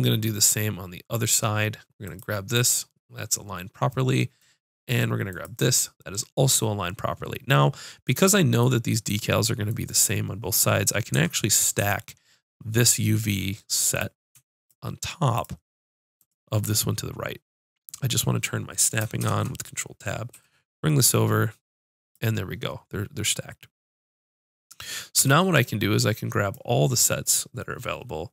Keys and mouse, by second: 4.5 middle click, 5.3-7.7 drag, 8.5 click, 11.1 Tab, 11.8 Tab, 13.9 click, 19.2 shift+Tab, 20.3 g, 25.1 b, 27.9-28.3 drag.